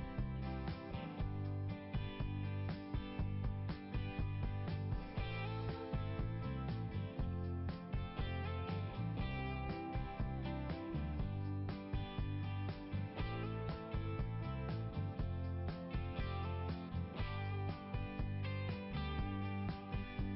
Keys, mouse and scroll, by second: 1.5 click, 4.2 click, 6.5 click, 8.7 right click, 8.9 right click, 9.2 right click, 9.6 right click, 9.9 right click, 10.2 right click, 11.8 click, 13.6 Delete, 13.9 Delete, 14.3 Delete, 14.6 Delete, 14.9 Delete, 15.3 Delete, 15.6 Delete, 15.9 Delete, 16.3 Delete, 16.6 Delete, 16.9 Delete, 17.2 Delete, 19.1 Delete, 19.1 right click.